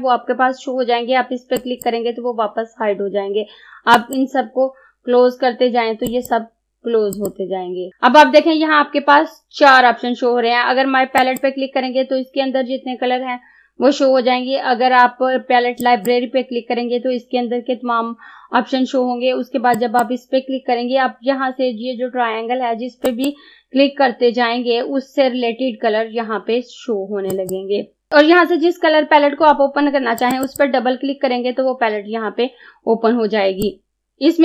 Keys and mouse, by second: 1.6 click, 4.0 click, 11.2 click, 15.8 click, 19.8 click, 23.1 click, 27.4 click, 30.2 click, 33.7 click.